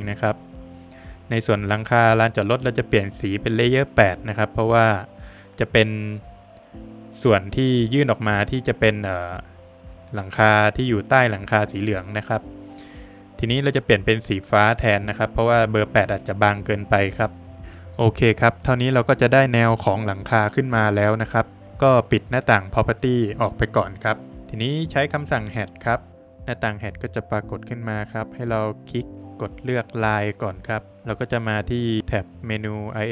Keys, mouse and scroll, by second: 2.3 double click, 3.4 click, 4.0 Escape, 4.5 scroll down 1, 4.8 middle click, 5.0 scroll up 2, 5.2 Escape, 5.8 click, 10.5 click, 12.0 click, 13.9 Escape, 14.4-14.7 scroll down 2, 14.6 middle click, 15.2-15.5 scroll down 2, 15.5 middle click, 15.9 Escape, 16.6 middle click, 17.4 scroll up 1, 17.6 Escape, 20.9 middle click, 23.4 click, 24.1 scroll up 1, 24.3 middle click, 24.3 scroll down 1, 29.1 click, 31.9 scroll down 3, 32.3 click, 32.9 scroll down 2.